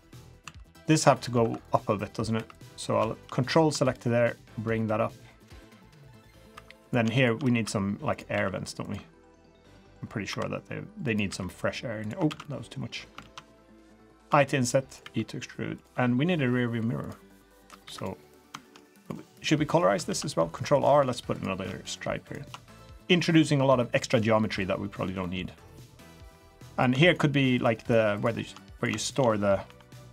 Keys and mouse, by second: 0.0 middle click, 0.4 2, 0.8 click, 1.4 2, 1.6 click, 2.3 3, 3.4 ctrl+click, 4.2-6.4 drag, 6.5 3, 6.8 click, 7.1 shift+click, 7.6 e, 8.3 s, 10.3 i, 11.3 e, 12.3 ctrl+z, 12.4 middle click, 13.2 ctrl+z, 14.2 i, 15.0 e, 16.3 g, 17.8 3, 18.2 click, 18.3 middle click, 18.6 shift+middle click, 19.6 middle click, 20.0 ctrl+r, 21.0 3, 21.3 click, 22.2 ctrl+shift+click, 23.4 g, 25.2-25.5 middle drag, 26.1 click, 26.7 click, 27.0 shift+click, 27.5 shift+click, 27.8 shift+click, 28.1 shift+click, 28.7 click, 29.0 shift+click.